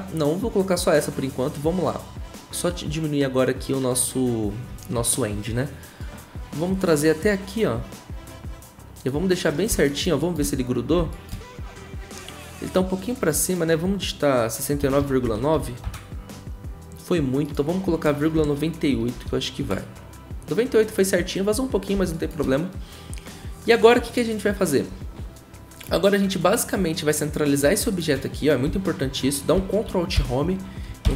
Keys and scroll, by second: 14.5-16.0 typing, 18.3 Right, 19.1 8, 19.6 Return, 30.1 ctrl+alt+Home, 31.0 ctrl+Home.